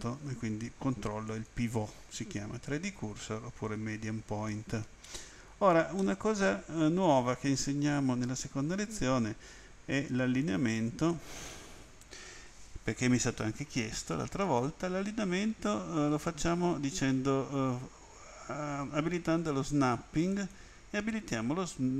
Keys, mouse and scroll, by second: 1.2 click, 6.0 middle click, 14.4 click, 20.3 click.